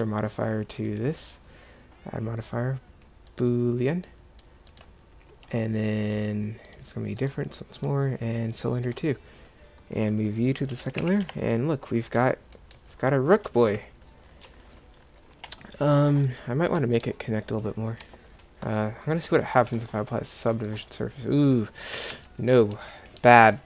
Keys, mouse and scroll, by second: 10.8 m, 22.2 Tab, 22.8 a, 23.3 Tab.